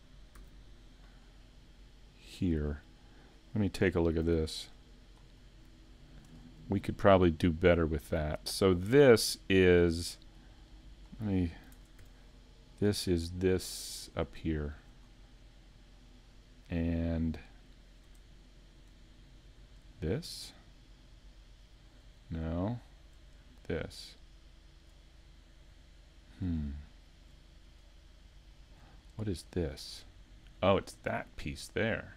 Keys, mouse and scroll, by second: 0.4 a, 2.7 scroll up 2, 4.3 scroll down 2, 4.3 g, 12.0 ctrl+Tab, 12.0 click, 13.6 middle click, 14.4 shift+middle click, 15.1-15.6 scroll up 3, 15.6 middle click, 22.3 middle click, 24.1 shift+right click, 29.4 shift+middle click, 29.4 scroll up 4, 31.0 middle click.